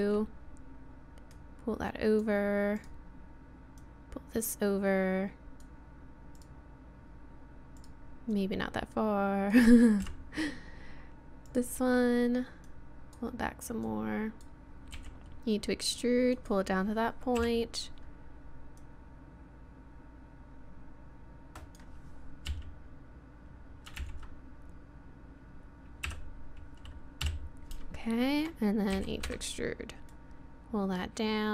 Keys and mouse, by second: 1.3-2.8 drag, 2.9 click, 2.9 right click, 3.8 click, 3.8 right click, 5.6 click, 6.4 right click, 6.6-10.0 drag, 8.3-10.0 right drag, 10.0 KP_3, 11.5-12.7 right drag, 15.0 e, 17.4 KP_7, 18.8 click, 22.5 KP_3, 24.0 ctrl+KP_1, 26.1 KP_7, 27.2 KP_3, 29.0 e, 30.1-31.4 drag.